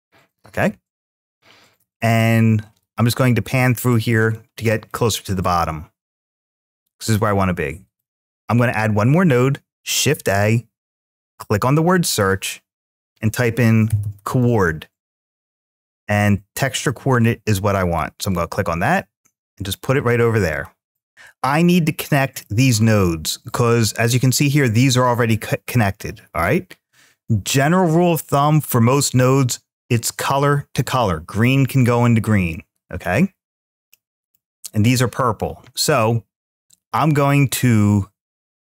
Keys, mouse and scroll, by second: 2.0-3.0 middle drag, 4.1-4.9 drag, 5.5-6.8 middle drag, 6.8-8.1 drag, 20.9 click, 22.2 middle click, 23.5-24.4 middle drag, 32.3 middle click, 33.7-36.4 middle drag.